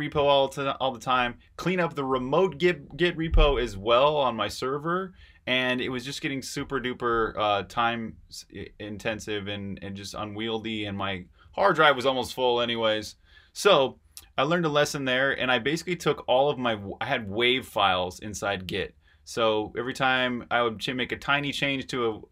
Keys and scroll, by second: 21.6 super+Tab.